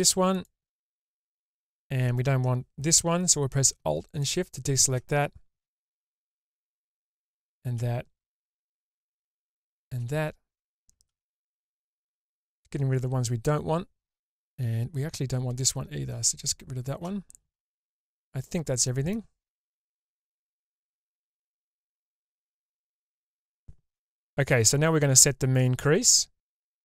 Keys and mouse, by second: 0.3 ctrl+alt+shift+click, 4.0 alt+shift+click, 6.9 alt+shift+click, 11.7 alt+shift+click, 16.4 alt+shift+click, 17.6-19.1 middle drag, 19.6 alt+z, 20.3-22.0 middle drag, 22.5 alt+z, 22.9-23.9 middle drag, 24.7 shift+middle click, 26.1 middle click.